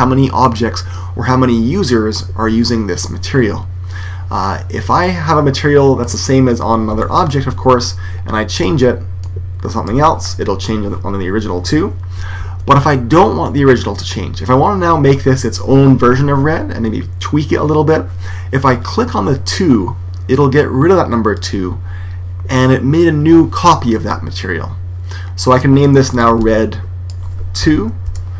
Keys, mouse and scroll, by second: 5.2-8.4 middle drag, 8.4 click, 12.3 super+z, 13.3-15.2 middle drag, 21.2 click, 25.4 click.